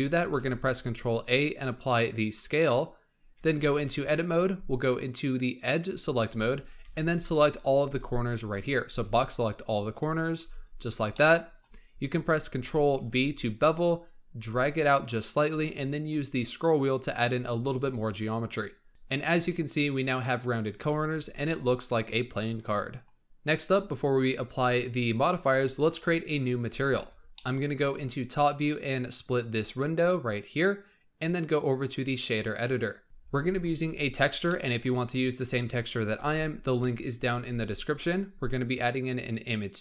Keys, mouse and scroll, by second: 0.3 ctrl+a, 3.3 Tab, 3.6-5.2 middle drag, 5.2 click, 6.3 z, 6.8 alt+a, 7.1 b, 7.8 b, 8.8 b, 10.4 b, 11.1 middle click, 11.8-12.9 scroll up 1, 12.9 ctrl+b, 18.9-20.8 middle drag, 20.8 z, 21.4-23.7 middle drag, 25.9 KP_7, 27.3-29.1 shift+middle drag, 29.1-33.3 drag, 33.3 n, 33.6-34.4 scroll up 7, 34.4 middle click, 35.0 scroll up 2, 36.1 shift+a.